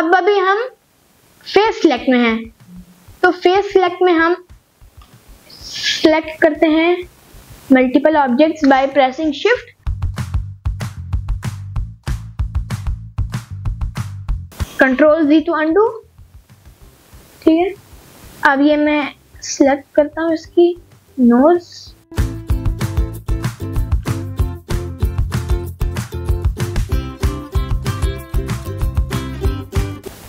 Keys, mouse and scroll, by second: 2.7-3.1 scroll up 2, 3.1 middle click, 3.8 middle click, 5.5 click, 7.3 shift+click, 8.1 shift+click, 8.6 shift+click, 10.4 scroll up 1, 11.3 scroll up 1, 11.5 shift+click, 12.2 shift+click, 12.9 shift+click, 13.8 shift+click, 15.6 ctrl+z, 16.8 shift+click, 17.8 shift+click, 18.9 shift+click, 19.6 shift+click, 20.6 shift+click, 21.6 shift+click, 22.1 shift+click, 22.8 middle click, 23.6 scroll down 1, 23.9-24.5 scroll up 1, 25.5 alt+shift+click, 26.2 middle click, 26.9-27.9 scroll down 1, 27.9 ctrl+click, 29.0-29.4 scroll up 1, 29.7 ctrl+click.